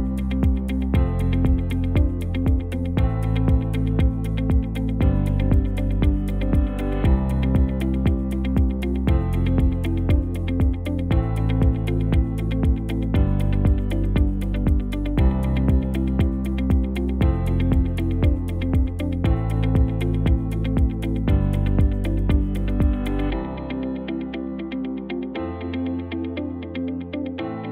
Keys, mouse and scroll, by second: 0.4 KP_0, 1.0 space.